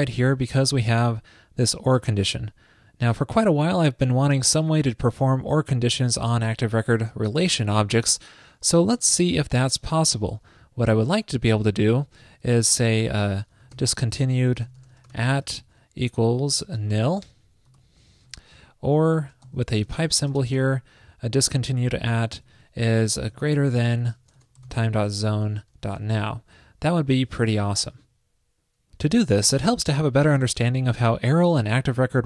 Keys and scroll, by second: 12.3 shift+super+Right, 18.3 alt+shift+Left, 18.4 alt+shift+Left, 18.5 alt+shift+Left, 18.9 alt+shift+Right, 19.5 super+c, 20.7 super+v, 24.1 alt+shift+Right, 27.9 super+s.